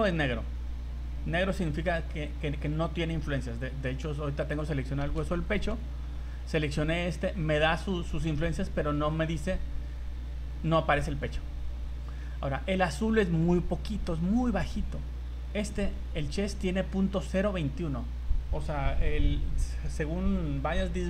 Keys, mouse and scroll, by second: 1.4 right click, 3.4 middle click, 5.3 shift+middle click, 14.1 right click.